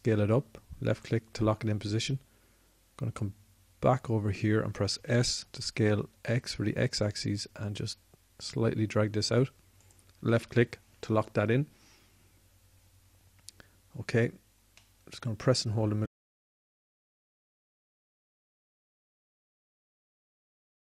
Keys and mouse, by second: 5.3 s.